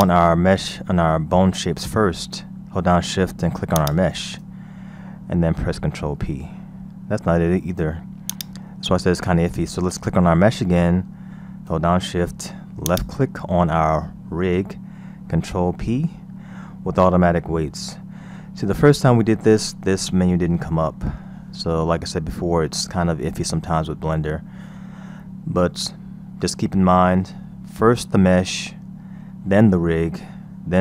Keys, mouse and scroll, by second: 0.0 click, 3.7 shift+click, 6.0 ctrl+p, 8.3 click, 12.8 shift+click, 15.5 ctrl+p.